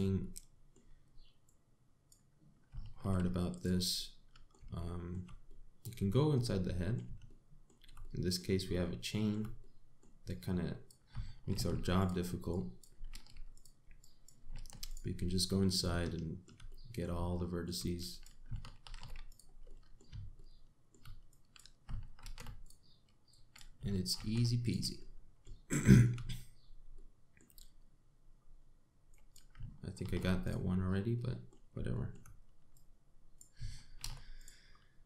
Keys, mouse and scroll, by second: 0.8 middle click, 2.1 click, 3.6 alt+m, 4.6 middle click, 5.4 shift+middle click, 6.1 middle click, 6.7-7.3 scroll up 2, 7.3 middle click, 7.9 shift+middle click, 8.7 middle click, 9.4 shift+middle click, 10.2 middle click, 10.9 click, 12.2 alt+m, 13.1 click, 13.7 alt+m, 14.6 click, 15.2 alt+m, 16.0 middle click, 16.6 shift+middle click, 17.3 middle click, 18.0 shift+middle click, 18.6 click, 19.5 alt+m, 20.3 middle click, 21.0 middle click, 21.9 click, 22.9 alt+m, 23.9 click, 24.8 alt+m, 25.6 middle click, 26.3 shift+middle click, 26.9-27.6 scroll up 2, 27.6 middle click, 28.2-29.0 scroll down 2, 29.0 scroll up 1, 29.7 click, 30.6 alt+m, 31.4 scroll down 3, 31.8 middle click, 32.6 shift+middle click, 33.4 click, 34.6 alt+m.